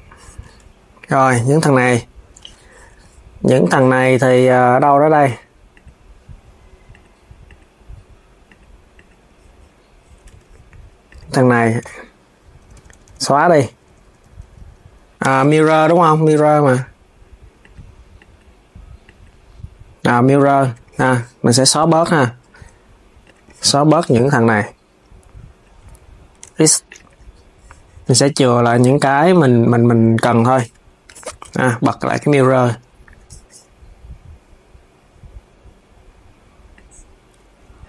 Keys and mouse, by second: 0.1 Tab, 2.1 Tab, 3.2 click, 5.0 click, 5.5 click, 6.6 click, 7.3 click, 8.2 click, 8.6 click, 10.0 Tab, 10.8 click, 11.5-13.1 l, 14.9 Tab, 16.3 click, 17.4 click, 17.9 click, 18.9 click, 20.0 click, 21.5 Tab, 22.9 click, 23.5 click, 26.1 x, 27.9 click, 29.4 x, 30.3 Tab, 31.1 s, 31.8 click, 32.8 Tab, 36.4 click.